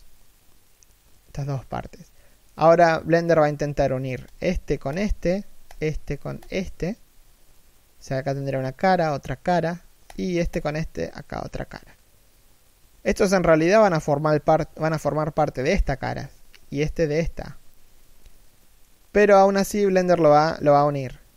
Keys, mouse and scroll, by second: 0.4 middle click, 4.0 right click, 4.6 shift+right click, 9.8 shift+right click, 18.3 middle click.